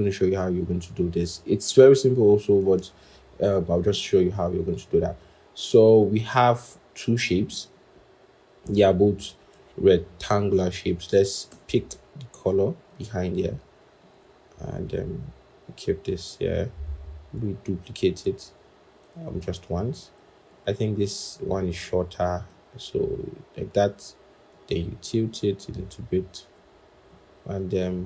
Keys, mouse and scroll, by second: 3.8 ctrl+=, 4.6-7.8 scroll, 11.4 i, 17.3 alt+click, 19.1 ctrl+z.